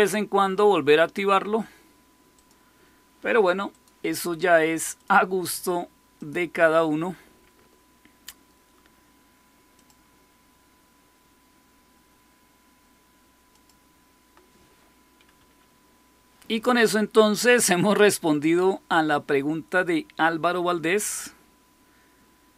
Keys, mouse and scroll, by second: 2.2 click, 3.6 click, 4.8 click, 6.0 click, 9.7 click, 13.4 click, 15.2 Escape.